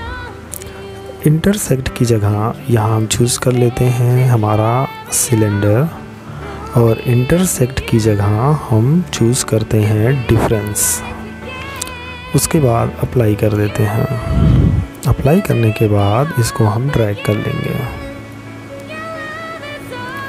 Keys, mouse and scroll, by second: 4.5 click, 10.7 click, 13.1 middle click, 16.1 click, 18.6 middle click.